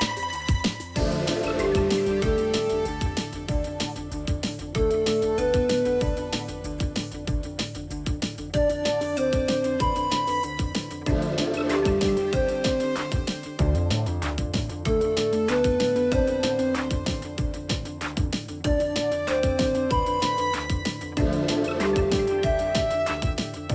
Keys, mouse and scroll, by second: 0.8 alt+scroll up 1, 1.1 alt+space, 1.9 t, 2.7 Return, 4.1 ctrl+a, 8.8 shift+c, 9.3 ctrl+a, 11.9 double click, 15.0 space, 15.3 double click, 15.4 space, 15.7-16.0 alt+scroll, 16.0 alt+scroll down 1, 16.0 space, 19.1 double click, 21.2 alt+scroll up 1, 23.1 shift+click.